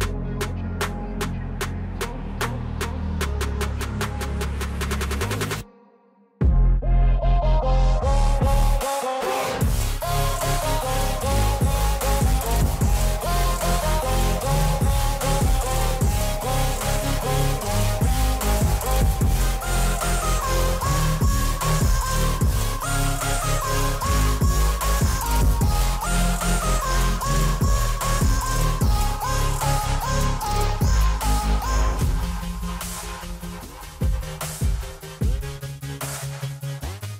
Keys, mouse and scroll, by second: 0.7-4.3 drag, 6.0-10.6 drag, 14.0 alt+click, 17.6 alt+scroll down 1, 18.5-19.8 drag, 19.8 alt+scroll up 1, 20.1 click, 21.0 click, 22.0 alt+scroll down 1, 22.4-24.0 drag, 25.2-26.3 scroll up 1, 26.4 scroll up 2, 28.0 click, 29.1 scroll down 1, 29.6-30.8 drag, 30.8 right click, 31.5-37.1 drag.